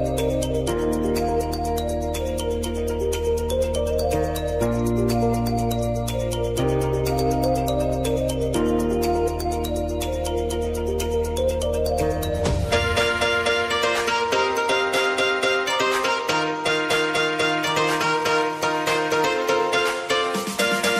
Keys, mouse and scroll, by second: 1.6 space, 3.8 click, 4.9 j, 5.2 click, 6.1 F9, 7.1 click, 7.7 =, 8.4-11.1 drag, 11.1-14.5 drag, 14.5 space, 16.7 click.